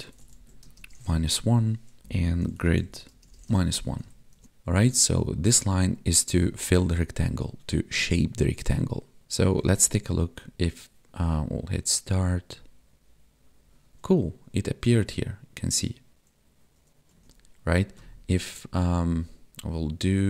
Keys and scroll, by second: 0.6 space, 1.0 space, 2.0 space, 3.0 space, 3.3 space, 4.3 ctrl+s, 9.7 Tab.